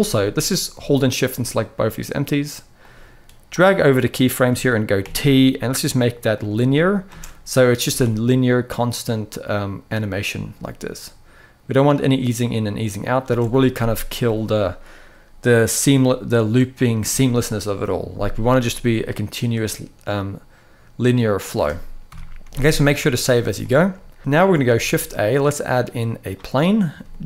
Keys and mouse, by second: 0.7 shift+click, 2.5-3.3 drag, 4.7 t, 6.9 space, 7.7 alt+a, 12.9 space, 13.4 middle click, 19.3-21.1 middle drag, 21.8 KP_1, 22.6 ctrl+s, 22.8 ctrl+s, 23.3-23.7 shift+middle drag, 24.4 shift+a, 26.4 middle click, 27.1 g.